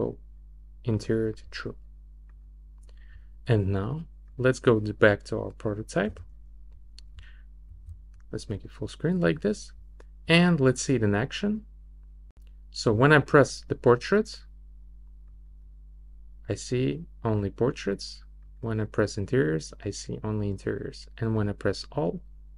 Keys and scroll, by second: 6.0 r, 7.7 super+\.